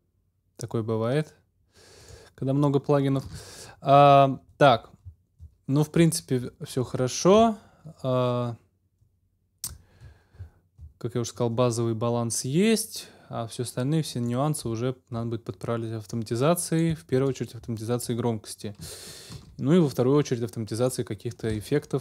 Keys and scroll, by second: 3.2 super+s, 19.3 super+s.